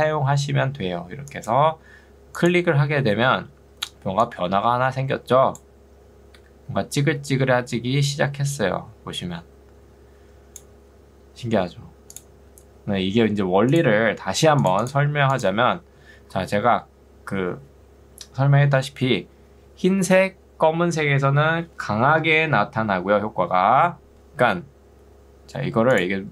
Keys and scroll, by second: 3.7 ctrl+2, 7.7 Escape.